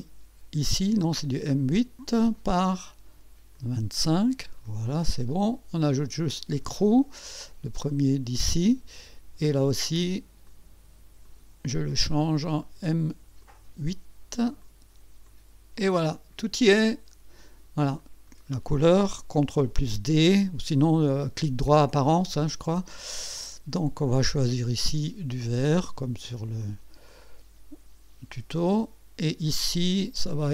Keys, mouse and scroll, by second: 2.3 click, 2.7 click, 3.5 click, 4.2 click, 4.6 click, 6.4 click, 7.9 click, 8.3 click, 10.5 click, 11.2 click, 12.6 click, 12.7 click, 13.4 click, 14.6 click, 15.2 click, 16.0-17.7 drag, 18.0 click, 22.3 ctrl+d, 23.7 click, 25.4 click, 26.6 click, 27.1 click, 28.6 click.